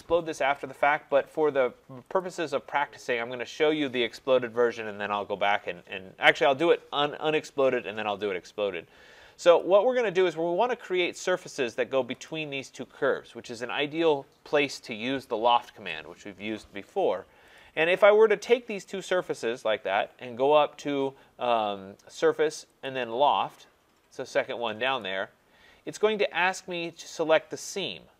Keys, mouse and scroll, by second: 2.2-7.3 drag, 9.6 click, 12.3 click, 17.6 click, 18.9 click, 22.9 click, 25.0 click.